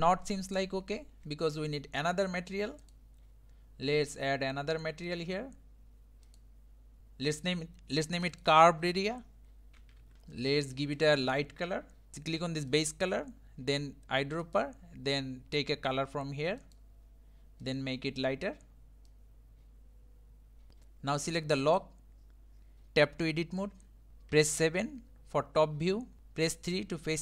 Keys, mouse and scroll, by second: 0.8 scroll down 2, 5.2-8.2 drag, 8.3-10.1 drag, 10.1 scroll up 4, 10.3-16.6 shift+middle drag, 18.7 click, 20.7 click, 21.4 click, 23.6 Tab, 24.1 scroll down 3, 24.3 KP_7, 25.8-26.2 scroll up 4, 26.2 3.